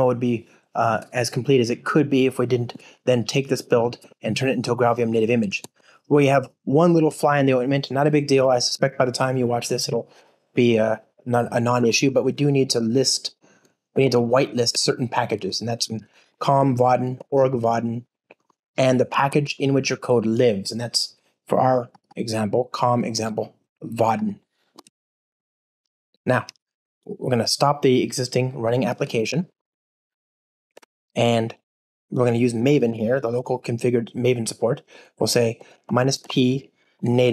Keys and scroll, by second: 8.7 shift+super+o, 14.7 Return, 19.2 ctrl+Tab, 28.7 super+F2, 29.1 shift+super+a, 30.7 alt+F12.